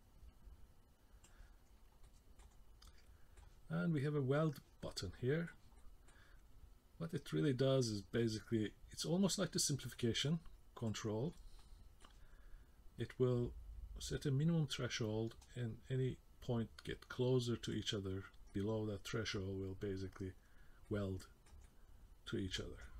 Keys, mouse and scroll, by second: 1.7-2.0 scroll up 2, 2.0 middle click, 2.5-2.8 scroll down 2, 2.8 middle click, 4.8 middle click, 5.8 middle click, 7.8 click, 11.3 middle click, 13.0 click, 18.5 middle click, 20.8 middle click, 21.6 middle click, 22.8 middle click.